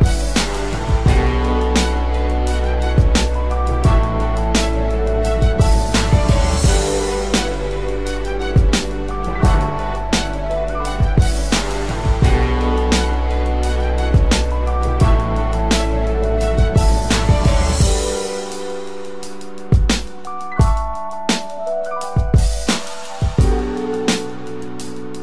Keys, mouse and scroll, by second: 4.6 right click, 7.0-7.7 typing, 8.0 double click.